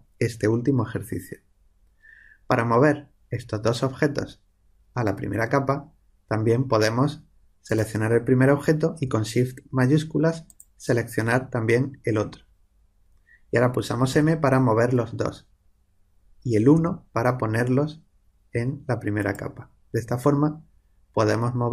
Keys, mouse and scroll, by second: 7.6 click, 10.4-12.2 drag, 14.1 m, 19.2-21.7 drag.